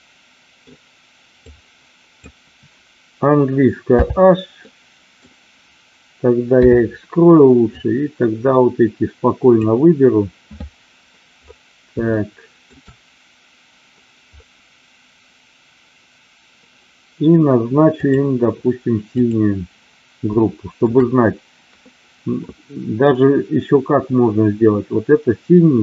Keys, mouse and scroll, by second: 1.3 click, 3.8 h, 4.5 middle click, 6.6 KP_7, 7.7-9.7 drag, 12.1-12.6 shift+middle drag, 17.9 click, 19.1 click, 20.4 shift+middle click.